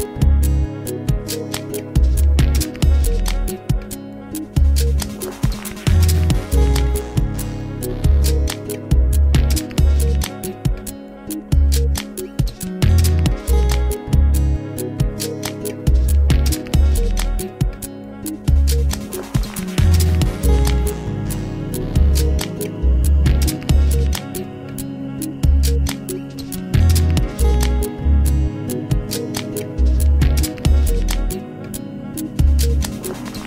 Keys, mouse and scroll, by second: 0.2 click, 0.9-3.8 scroll down 1, 3.8-5.1 drag, 5.1-6.4 scroll down 3, 6.4-7.0 drag, 7.0-7.5 scroll down 2, 7.9-11.1 drag, 13.2-15.1 middle drag, 15.1-15.7 scroll up 4, 15.7-17.3 middle drag, 17.3-18.1 scroll down 3, 18.1 click, 18.5 Tab, 19.5 a, 19.7 a, 20.1 a, 21.0 r, 22.9 Tab, 23.5-24.1 scroll up 4, 24.1-25.7 middle drag, 25.7-26.7 scroll down 3, 26.7-27.4 middle drag, 27.4-28.4 scroll up 3, 28.4 click, 29.4 Tab, 31.6 ctrl+r.